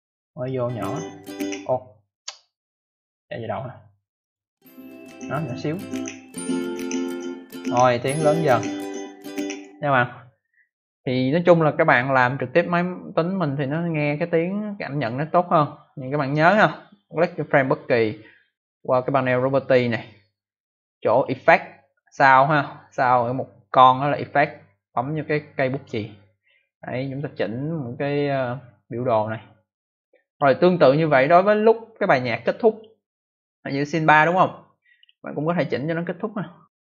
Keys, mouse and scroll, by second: 0.4 click, 0.5 click, 1.2 click, 2.8 click, 4.1 click, 4.2 click, 9.4 click, 12.3 click, 16.0 click, 16.1 click, 19.9 click, 25.6 click, 28.3 click, 31.0 click, 31.1 click, 32.6 click, 34.1 click, 34.9 click, 36.6 click.